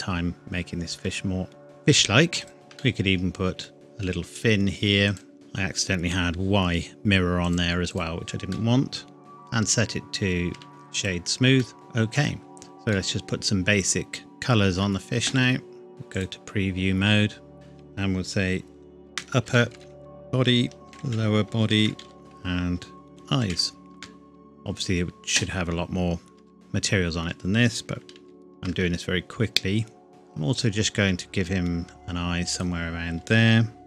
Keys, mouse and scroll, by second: 2.4 alt+click, 2.5 shift+click, 2.8 middle click, 3.7 g, 5.1 click, 5.3 middle click, 7.4 click, 8.5 middle click, 9.2 right click, 10.5 Tab, 10.7 right click, 11.0 click, 11.5 scroll up 1, 11.8 middle click, 12.5-12.9 scroll down 1, 12.9 middle click, 15.9 click, 19.1-22.0 typing, 22.2 click, 23.1 typing, 23.9 KP_Enter, 26.4 Tab, 26.5 scroll up 1, 28.1 ctrl+r, 28.7-30.1 scroll up 1, 30.1 click.